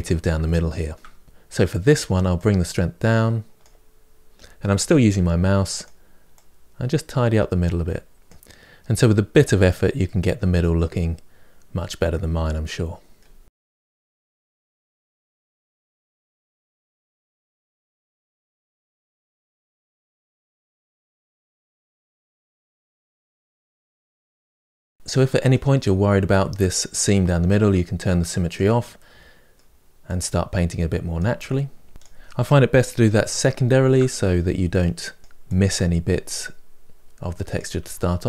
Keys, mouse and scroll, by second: 0.6-2.2 shift+middle drag, 2.2-4.8 drag, 4.8 f, 6.1-9.0 drag, 9.0 shift+middle click, 9.5-10.8 ctrl+right drag, 10.8-12.3 drag, 12.3-14.1 middle drag, 14.1 click, 15.1 middle click, 15.1 shift+right click, 15.5 click, 16.2 shift+middle click, 16.8-18.0 drag, 18.0 middle click, 18.7 ctrl+right click, 18.9 middle click, 19.1 right click, 19.3 f, 19.5 click, 20.1 shift+middle click, 20.7 click, 21.1-22.1 middle drag, 22.1 click, 22.2 middle click, 22.5 f, 22.8 click, 23.5-25.1 middle drag, 25.1 scroll up 2, 25.3 middle click, 26.0 click, 26.2 middle click, 26.6-28.3 drag, 28.3 shift+middle click, 28.7-30.3 drag, 30.3 shift+middle click, 30.9 click, 31.8 shift+middle click, 32.1 click, 32.8 shift+middle click, 33.1 click, 33.7 shift+middle click, 34.3 click, 34.8 middle click, 35.1-37.1 drag, 37.7-38.2 drag.